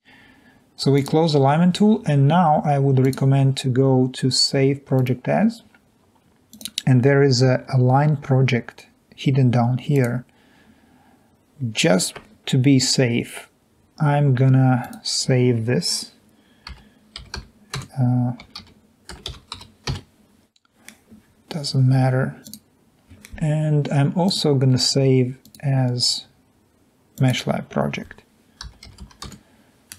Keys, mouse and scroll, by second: 6.5 click, 9.9 click, 14.9 click, 16.8-20.6 typing, 22.5 click, 27.2 click, 28.5-29.9 typing.